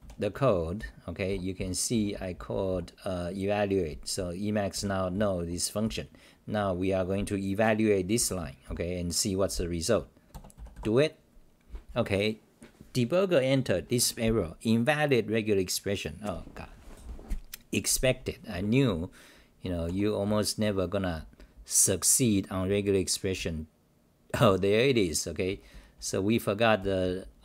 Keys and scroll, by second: 0.0-2.0 typing, 4.9-6.5 typing, 8.6 t, 18.5 w, 19.6 Home, 19.9-26.8 typing, 20.6 Home.